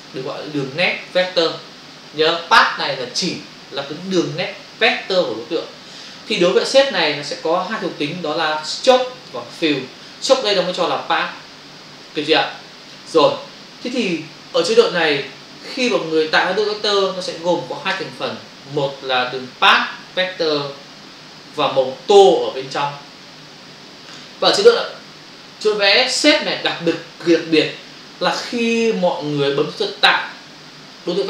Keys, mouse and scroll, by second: 1.9 click, 7.6 click, 12.6 click.